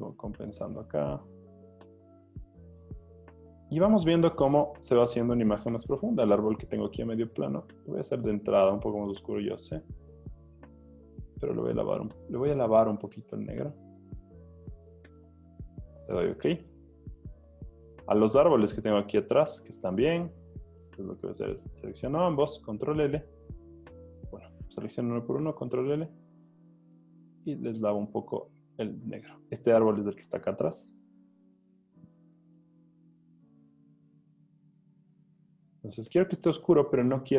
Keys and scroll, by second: 3.9 v, 6.0 super+l, 22.5 super+l, 25.4 super+l.